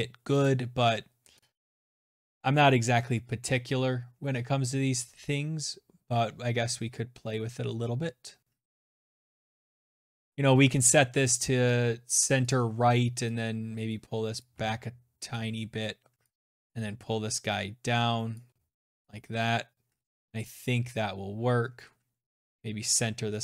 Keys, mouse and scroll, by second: 0.2 click, 11.3 click, 13.1 click, 13.3 ctrl+z, 15.0 shift+click, 17.2 shift+click, 19.5 click, 22.6 click.